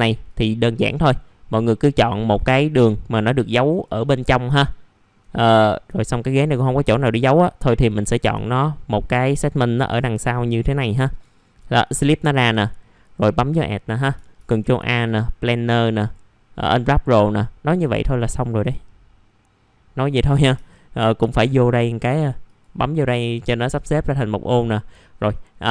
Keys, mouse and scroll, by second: 0.2 click, 1.2 alt+middle click, 2.0 right click, 3.7 click, 4.1 middle click, 4.2 scroll down 1, 4.5 alt+middle click, 5.3 middle click, 5.4-5.9 scroll down 1, 6.6-7.7 scroll up 1, 8.1 click, 8.1 scroll down 1, 8.5 alt+middle click, 9.2-10.1 scroll up 1, 10.1 click, 10.6-11.0 scroll up 1, 11.0 right click, 11.8 click, 15.0 click, 20.0 middle click, 20.2 scroll down 1, 21.2-22.4 drag, 24.9-25.7 scroll up 1.